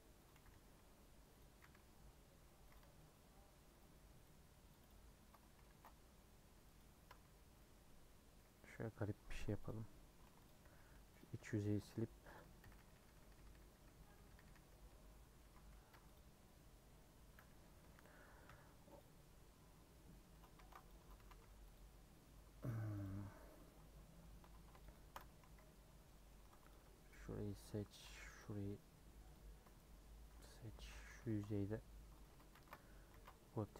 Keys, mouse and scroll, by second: 0.3 g, 1.6 s, 2.8 Tab, 2.9-4.9 middle drag, 4.9 right click, 5.0 Tab, 5.7 ctrl+b, 7.1 Tab, 7.6 middle click, 8.4 Tab, 8.5 scroll up 1, 8.6 middle click, 9.4 2, 9.6 click, 10.2 3, 10.4 click, 11.2 x, 11.4 2, 11.7 click, 12.3 click, 12.6-15.4 typing, 15.9 Tab, 16.1 click, 16.9 Tab, 19.0 u, 19.9-20.3 scroll down 2, 20.3 Tab, 21.2 a, 21.7 u, 22.2 Tab, 22.7 click, 23.0 click, 23.1 Tab, 24.0 middle click, 24.4 Tab, 25.2 Tab, 25.4 a, 25.6 scroll up 1, 26.0 middle click, 26.3 2, 26.7 alt+Left, 27.4-29.3 middle drag, 29.3 alt+Left, 30.0 middle click, 30.7 3, 30.9 click, 31.3 ctrl+b, 32.3 Tab, 33.7 ctrl+a.